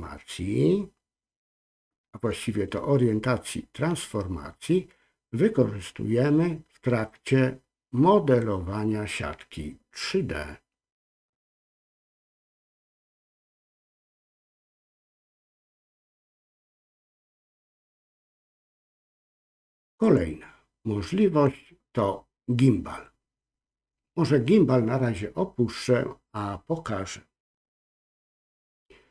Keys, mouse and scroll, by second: 20.0-29.1 drag.